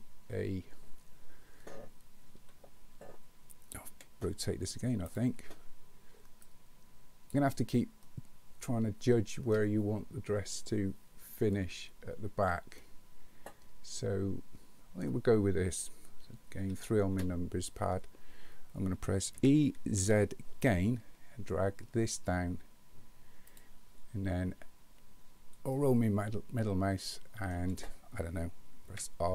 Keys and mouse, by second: 2.5 KP_3, 3.9 r, 6.5 click, 8.0-9.5 middle drag, 12.8-15.0 middle drag, 16.6 KP_3, 19.4 e, 25.7-27.5 shift+middle drag, 28.9 r.